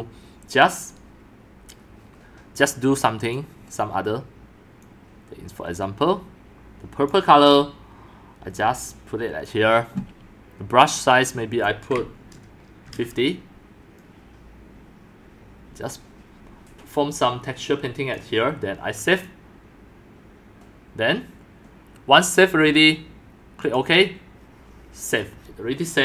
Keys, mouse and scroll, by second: 0.0-11.2 drag, 11.9 click, 12.6-13.4 typing, 16.3-18.4 typing, 18.1-19.4 drag, 22.6-26.0 drag.